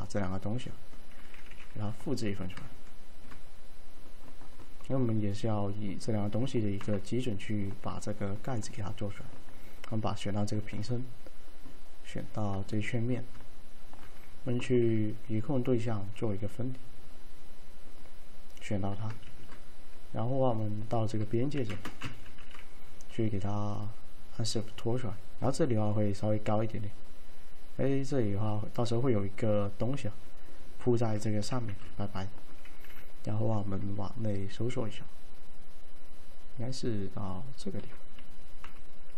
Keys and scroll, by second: 1.6 w, 6.9 F3, 14.7 alt+d, 19.4 ctrl+shift+a, 21.6-21.9 typing, 31.8 t, 32.9 r, 38.7 F3.